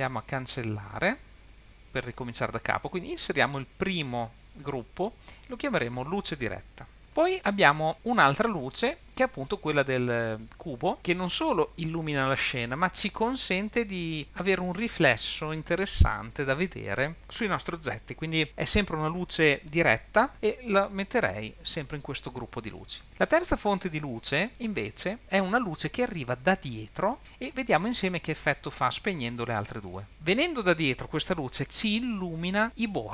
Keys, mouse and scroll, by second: 1.2 click, 1.4 click, 4.6-6.9 shift+drag, 6.5 t, 10.9 click, 25.1 click, 28.7 click, 29.2 click.